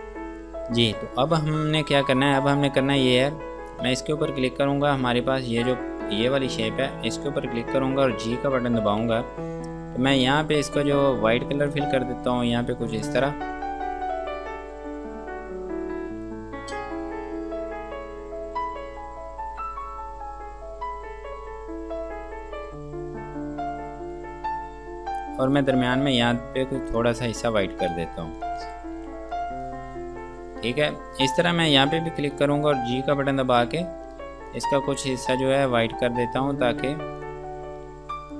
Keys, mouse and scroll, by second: 0.8 scroll up 1, 1.5 scroll down 1, 2.2-3.8 scroll up 1, 3.9 click, 4.7-5.1 scroll down 1, 5.1 scroll up 1, 5.9 click, 7.6 scroll down 1, 9.1 g, 11.9 click, 25.7 click, 28.2 ctrl+space, 28.6 click, 29.2 F2, 29.5 click, 32.6 click, 33.4 g, 34.7 click.